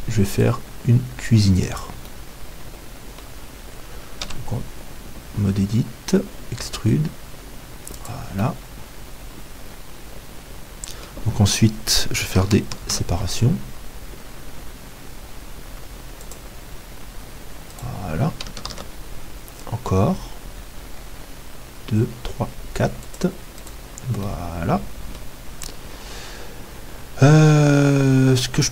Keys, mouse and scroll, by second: 0.4-4.4 drag, 2.1-4.4 middle drag, 4.4 Tab, 4.4 ', 6.7 e, 12.9 ctrl+r, 17.8-19.7 right drag, 18.6 ctrl+r, 19.7-20.7 scroll down 1, 23.7-25.9 right drag, 24.3-28.7 middle drag.